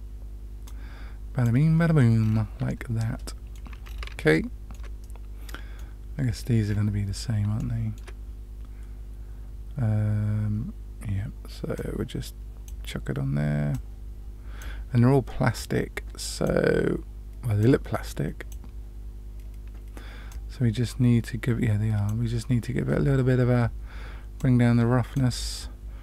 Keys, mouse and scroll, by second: 0.6-1.4 drag, 2.2 scroll down 1, 2.2-2.9 scroll up 1, 2.9-3.5 middle drag, 2.9-3.5 scroll down 1, 3.8-4.1 scroll down 2, 4.3-4.7 shift+middle drag, 5.0-5.8 middle drag, 6.3-7.2 scroll up 3, 7.5-8.0 shift+middle drag, 7.5-8.0 scroll up 1, 11.7 click, 13.7-14.5 drag, 15.5 click, 17.5-18.4 drag, 20.2-22.0 drag, 24.3 click.